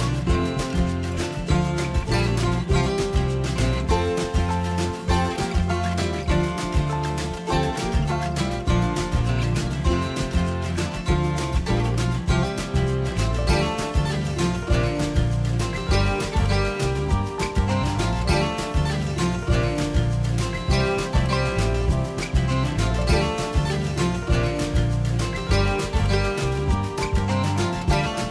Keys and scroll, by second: 3.0 ctrl+a, 5.7-7.9 typing, 13.6-14.4 typing, 15.9 typing.